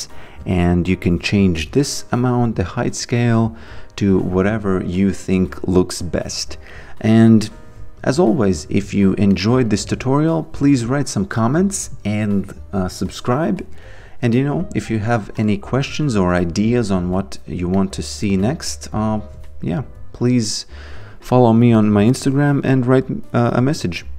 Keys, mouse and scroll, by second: 0.4 click, 5.3 alt+click, 8.4 alt+right click, 9.4 alt+middle click, 10.1 alt+click, 15.2 alt+click, 17.8 alt+middle click, 18.7 alt+right click.